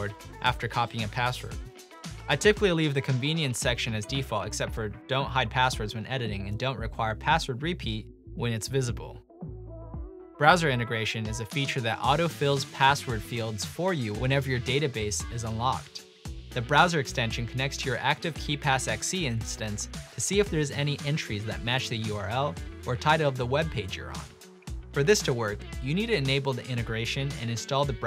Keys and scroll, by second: 0.4-2.8 typing, 5.5 typing, 23.3 typing, 24.9 BackSpace, 27.4-27.9 typing.